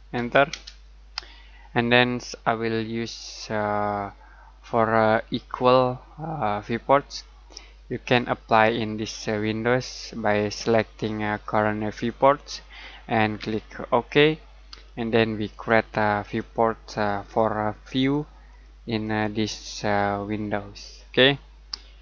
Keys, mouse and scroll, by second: 0.0-0.5 typing, 7.6 click, 10.5 click.